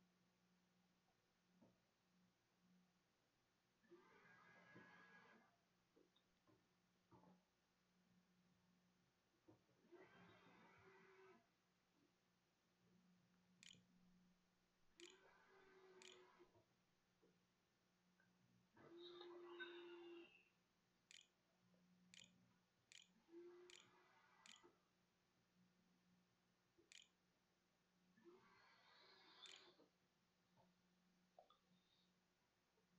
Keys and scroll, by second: 2.3 0, 8.9 [, 9.5 p, 12.3-16.7 typing, 19.7-26.1 typing, 26.7 Tab, 27.9-30.6 typing.